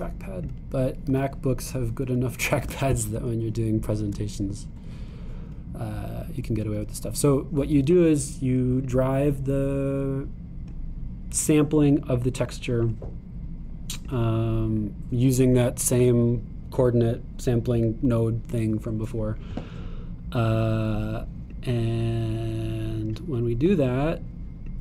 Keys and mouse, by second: 1.4 click, 2.1 g, 9.8-24.8 drag.